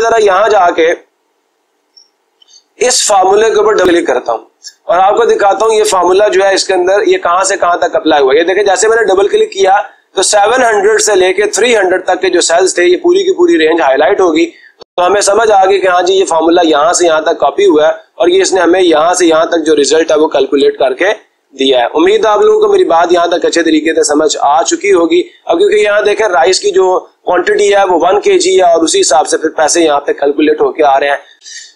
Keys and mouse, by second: 3.2 click, 3.4 click, 18.6-19.7 drag, 24.0 click.